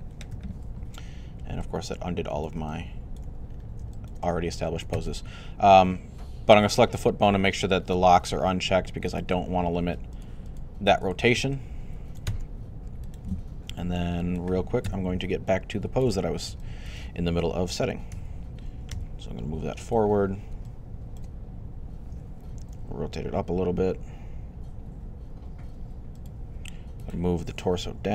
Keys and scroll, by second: 0.2 typing, 14.4-15.2 typing, 18.0-18.7 typing, 22.4 typing.